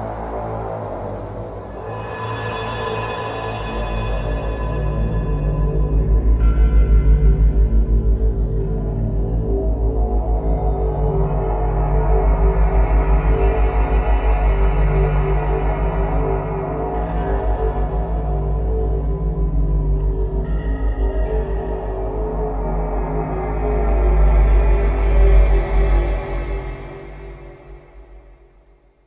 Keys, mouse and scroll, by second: 1.2 click, 1.9 click, 2.6 click, 3.9 middle click, 5.5-5.9 scroll up 2, 6.4-6.8 scroll up 1, 7.1 z, 7.6-8.5 scroll up 5, 8.6 middle click, 11.5 click, 12.8 middle click, 14.5-15.3 scroll down 7, 15.7 scroll down 1, 17.1 click, 18.3 click, 20.2 click, 21.7 click, 23.4 click, 25.9 click, 26.7-27.2 scroll down 3, 27.7 middle click.